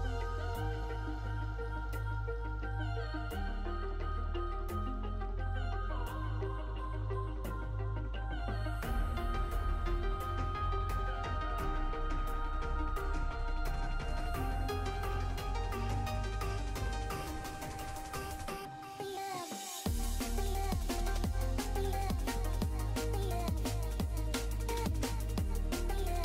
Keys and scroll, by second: 20.9 s, 24.9 s.